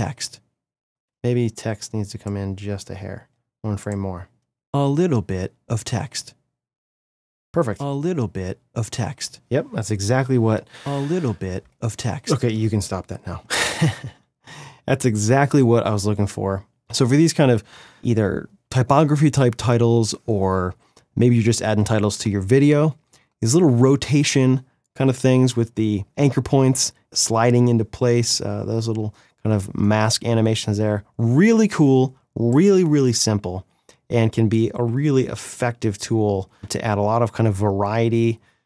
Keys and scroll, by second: 1.2 space, 12.6 space.